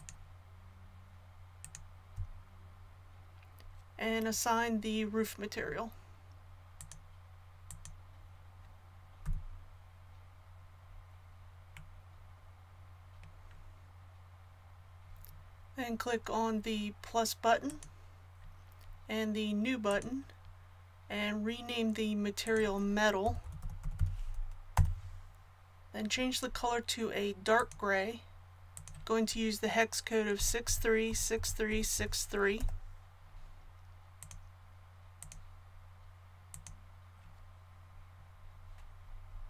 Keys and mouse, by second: 9.2 a, 17.7-24.3 drag, 27.5-36.0 drag.